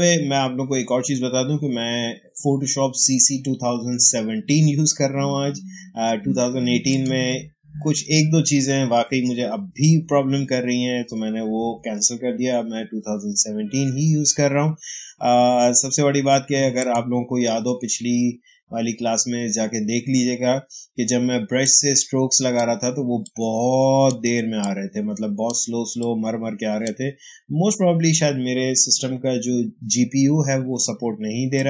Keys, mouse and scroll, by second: 23.2-29.2 drag, 31.4-31.6 drag.